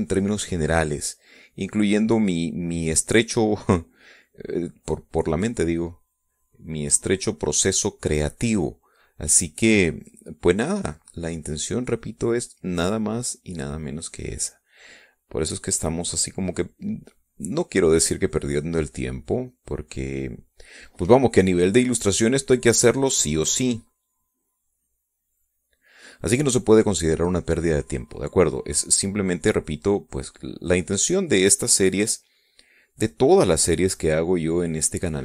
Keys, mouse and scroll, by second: 5.9-8.6 drag, 9.3-15.0 drag, 15.7-19.0 drag, 19.6-21.4 drag, 22.7-26.7 drag, 27.8 middle click, 29.5-35.2 drag.